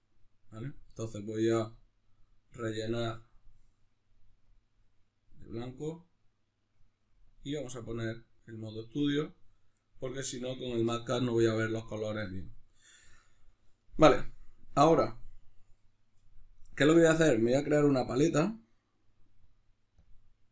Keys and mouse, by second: 1.7 click, 3.4-10.1 drag, 10.1-20.5 middle drag.